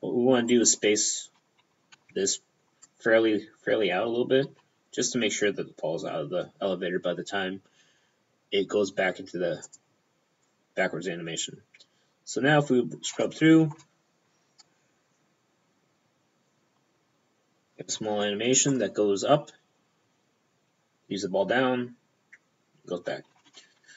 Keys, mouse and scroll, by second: 0.6 right click, 0.7 p, 2.0 b, 2.4 click, 4.5 g, 4.7 p, 9.7 click, 10.5 click, 13.3 p, 13.7 alt+a, 13.9 alt+p, 17.9 alt+a, 18.0 p.